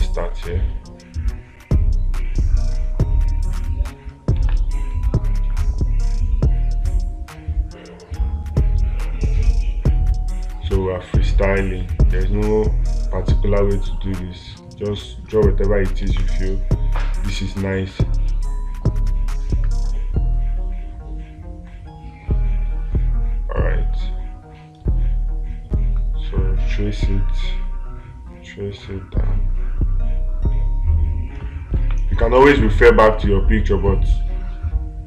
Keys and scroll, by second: 4.8 space, 16.5 space, 32.2 space.